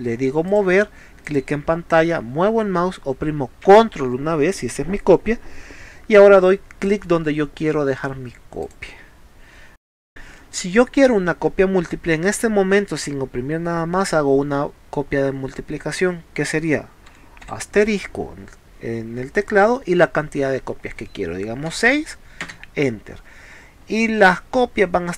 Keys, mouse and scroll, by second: 0.5 click, 1.3 click, 8.7 click, 23.4 middle click.